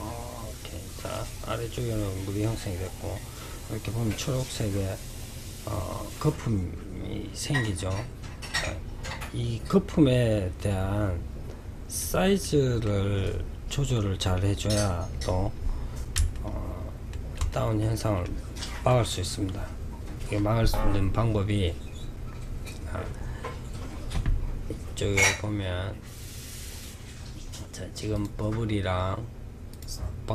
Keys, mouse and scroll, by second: 1.2-4.3 middle drag, 5.2-7.9 drag, 9.2-11.6 drag, 11.6-12.3 middle drag, 12.3-13.1 scroll up 4, 13.1-19.7 middle drag, 24.3-25.5 scroll down 1, 25.5 scroll down 1, 26.6 scroll down 2, 27.3 click, 28.8 click, 29.8 click.